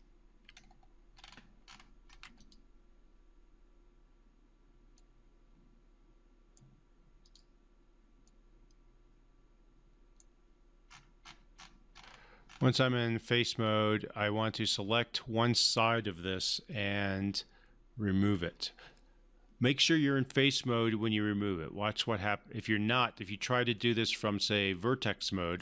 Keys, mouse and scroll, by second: 0.6-1.1 alt+scroll down 2, 1.1 scroll up 2, 1.7-2.4 alt+scroll up 2, 2.4 click, 5.0-6.8 right drag, 7.2 click, 8.4-10.4 right drag, 10.8 scroll up 1, 10.9 scroll down 1, 11.2-11.6 scroll up 1, 13.6-14.9 drag, 23.1 click, 23.7-25.6 right drag.